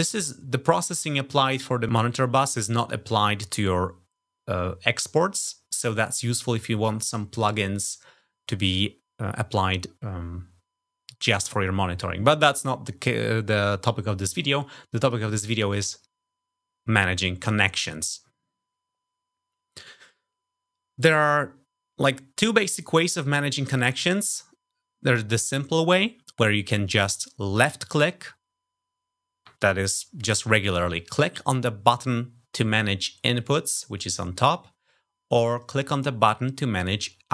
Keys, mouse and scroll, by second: 15.0 click, 27.5 click, 35.5 click.